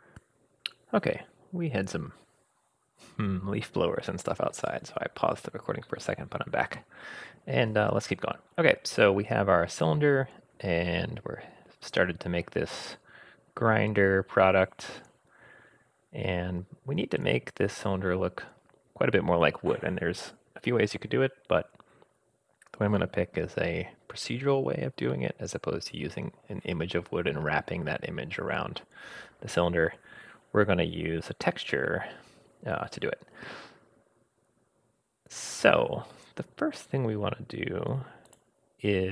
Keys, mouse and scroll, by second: 6.7 scroll down 1, 6.8-17.8 middle drag, 17.1-17.8 scroll up 1, 38.3 click.